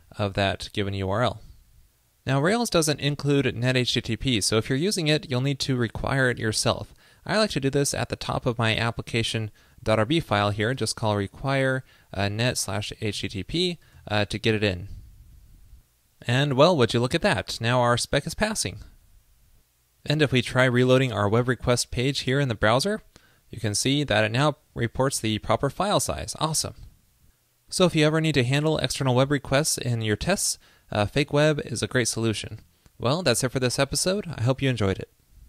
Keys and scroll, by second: 14.0 super+s, 22.7 super+r.